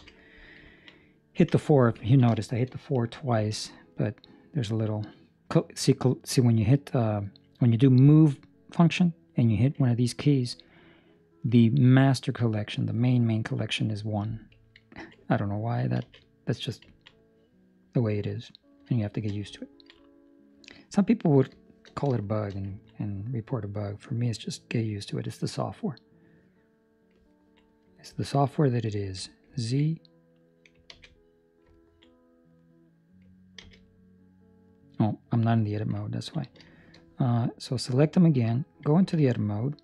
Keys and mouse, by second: 0.6 ctrl+middle click, 2.0 ctrl+middle click, 2.3 shift+middle click, 2.6 shift+middle click, 3.9 middle click, 14.8 ctrl+middle click, 15.2 middle click, 16.0 alt+a, 17.0 middle click, 17.0 middle click, 19.0 shift+middle click, 19.5 ctrl+middle click, 20.2 right click, 20.6 middle click, 21.5 middle click, 22.4 shift+middle click, 22.6 ctrl+middle click, 22.9 middle click, 26.3 middle click, 27.2 ctrl+middle click, 29.0 z, 29.5 ctrl+middle click, 29.8 middle click, 30.8 alt+a, 31.1 middle click, 31.7 ctrl+middle click, 32.0 middle click, 32.7 middle click, 32.9 ctrl+middle click, 33.5 a, 33.8 middle click, 34.8 middle click, 36.0 ctrl+middle click, 36.2 ctrl+middle click, 36.8 shift+middle click, 37.5 right click, 39.0 Tab.